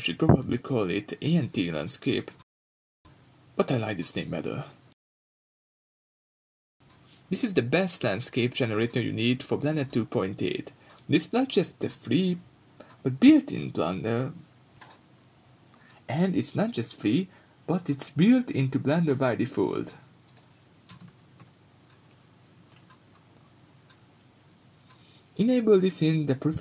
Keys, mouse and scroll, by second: 0.0 click, 2.3 click, 4.9 n, 8.6 click, 9.6 scroll up 1, 11.5 click, 12.8-13.2 scroll down 1, 17.9-26.6 drag.